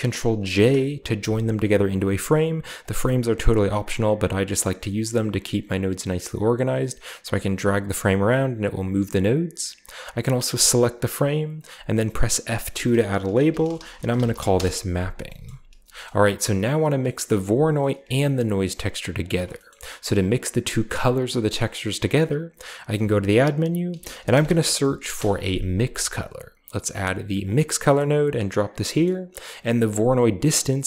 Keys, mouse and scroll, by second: 0.4 ctrl+j, 1.9 click, 2.7-4.0 drag, 4.5 click, 6.2-7.8 drag, 9.9-11.2 drag, 12.4 F2, 13.4-15.6 typing, 15.0-15.8 scroll down 1, 15.2 middle click, 15.8-16.9 scroll up 1, 16.0-16.9 middle drag, 18.2-18.8 ctrl+shift+drag, 19.1 ctrl+shift+drag, 19.3 click, 19.4 middle click, 19.6-21.4 drag, 21.5-22.8 middle drag, 22.9-24.9 typing, 27.3 click, 28.4 click, 28.6 click, 29.3-30.4 scroll up 1, 30.4-30.8 drag.